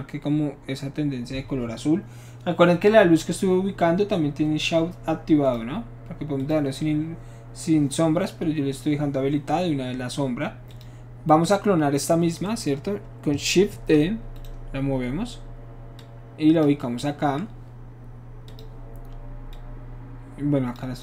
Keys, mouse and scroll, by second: 5.5 click, 6.4 click, 10.7 click, 13.7 shift+d, 14.4 right click, 16.0 click, 18.5 click, 19.5-20.7 drag.